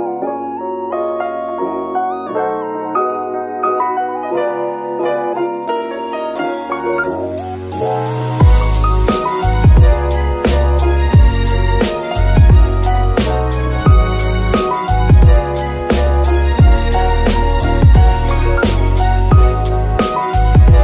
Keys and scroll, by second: 2.4 r, 10.1 KP_3, 13.0 g, 13.1 z, 15.0 s.